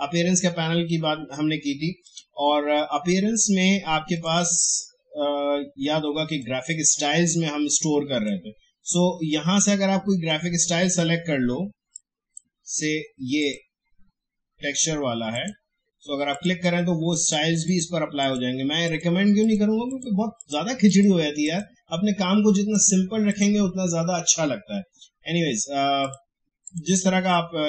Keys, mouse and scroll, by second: 2.0-13.4 drag, 26.0 click.